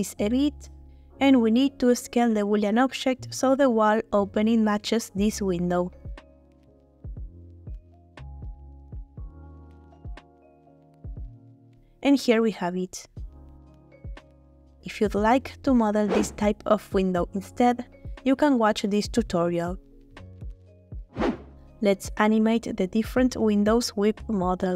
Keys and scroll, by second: 5.2 s, 5.5 y, 10.0 h.